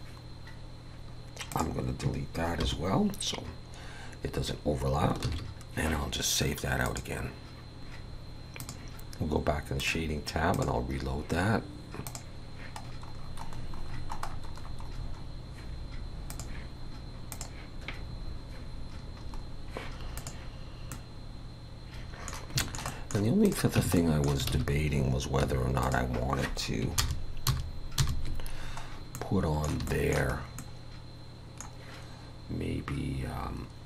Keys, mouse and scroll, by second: 20.3 click, 20.3 scroll up 3, 20.9 middle click, 22.6 shift+middle click, 22.9 middle click, 23.4 click, 23.8 Tab, 24.0 middle click, 24.5 alt+a, 25.4 3, 25.8 click, 27.0 ctrl+KP_Add, 27.5 ctrl+KP_Add, 28.0 ctrl+KP_Add, 28.9 scroll up 3, 29.2 middle click, 29.9 shift+middle click, 30.4 scroll up 1, 30.6 middle click.